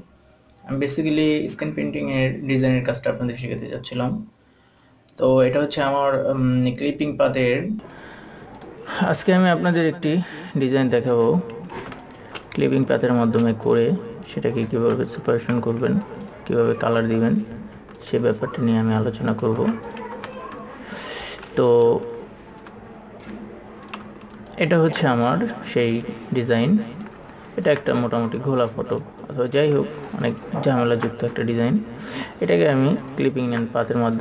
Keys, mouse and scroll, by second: 1.3 click, 3.3 ctrl+s, 3.9-4.2 scroll up 1, 4.2 scroll down 1, 4.5 scroll up 1, 4.8 scroll down 1, 6.2 click, 7.1 KP_2, 7.7-9.3 drag, 9.8 ctrl+a, 10.5 click, 10.8 ctrl+s, 11.2-11.6 scroll down 1, 11.6-11.9 scroll up 1, 11.9 scroll down 1, 13.0 scroll up 1, 13.5-14.0 scroll down 1, 14.1 click, 15.6 KP_2, 16.4 click, 18.4 alt+click, 20.6 ctrl+space, 21.4 click, 24.3 click, 24.4 ctrl+space, 24.8 click, 25.0 ctrl+space, 25.7 click, 26.4 typing, 27.9 ctrl+click, 29.1 click, 30.4 ctrl+alt+super+click, 33.4 ctrl+alt+super+click.